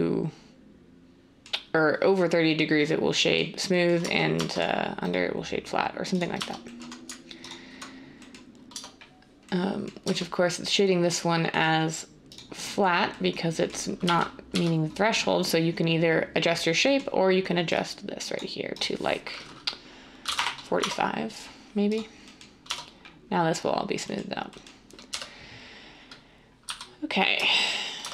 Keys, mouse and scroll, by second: 4.0 Tab, 4.3 Tab, 6.3 Tab, 8.7 Tab, 10.0 Tab, 14.0-14.5 typing, 20.2 typing, 20.4 Return, 20.7 Tab, 22.6 Tab, 25.1 1, 26.6 z, 28.0 Tab.